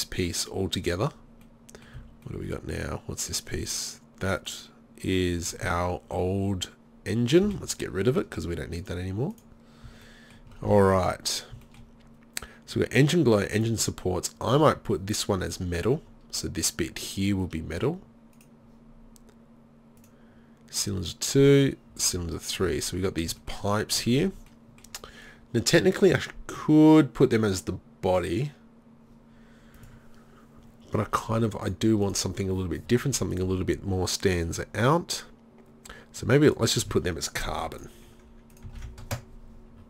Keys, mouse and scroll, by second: 1.1-2.9 middle drag, 2.0 z, 4.4-7.5 middle drag, 7.5 Delete, 9.9 middle click, 9.9 z, 18.4-20.1 right drag, 20.2-23.1 right drag, 22.2 z, 22.7 z, 29.8-36.5 drag, 37.8-39.8 drag.